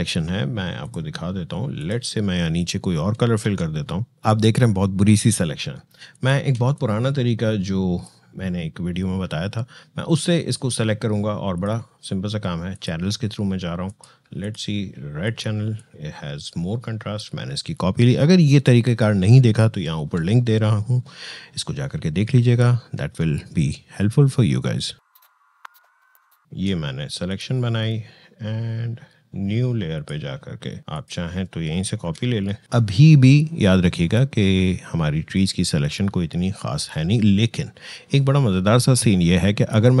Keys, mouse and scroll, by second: 3.1 alt+BackSpace, 5.9-10.4 shift+drag, 11.3-22.5 drag, 22.5 ctrl+l, 25.0 click, 26.1 ctrl+i, 26.3 ctrl+click, 31.8 ctrl+j, 32.6-40.0 drag.